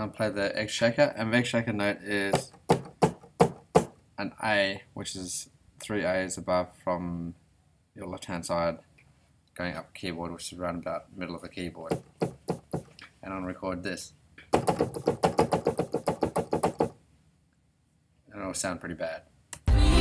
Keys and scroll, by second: 19.5 r.